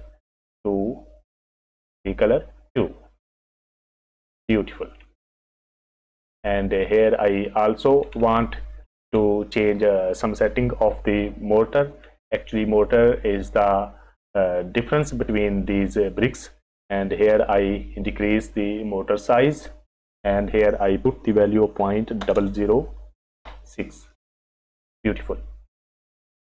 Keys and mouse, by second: 5.8 click, 8.6 click, 20.2-21.9 drag, 21.9-24.1 middle drag, 22.3 KP_0.